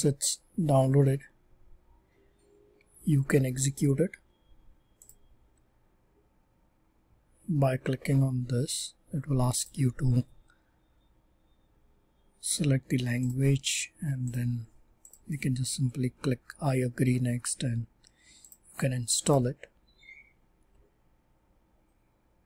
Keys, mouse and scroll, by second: 4.9 click.